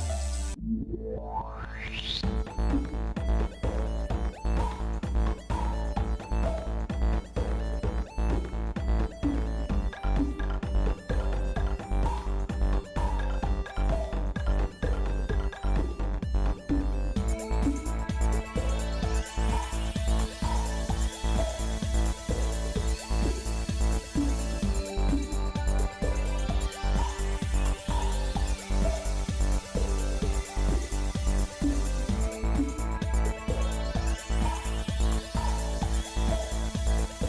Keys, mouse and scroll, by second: 1.0 g, 11.1-12.3 shift+middle drag, 12.7 shift+middle click, 13.3 scroll down 2, 13.5 scroll up 1, 13.7 scroll down 2, 13.9 middle click, 14.6-15.0 scroll down 2, 15.1 middle click, 15.6 middle click, 16.2 middle click, 16.9-17.6 scroll up 3, 17.7 middle click, 18.4-20.6 shift+middle drag, 22.4 ctrl+KP_Add, 22.8 ctrl+KP_Add, 23.0 ctrl+KP_Add, 24.4 g, 31.7 shift+middle click, 32.7 middle click, 33.4 Tab, 33.7 click, 34.8 shift+middle click, 35.5 Tab.